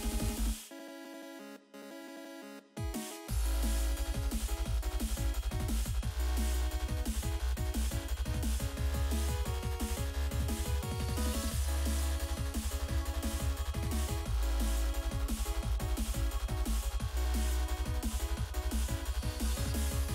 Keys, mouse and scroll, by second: 0.6 scroll down 1, 6.2 click, 7.1 click, 7.2 double click, 8.2 double click, 8.4 double click, 10.3 click, 11.2 click, 14.0 click, 14.1 click, 15.5-16.5 scroll down 1, 16.5 click, 18.5 click, 19.8 F5.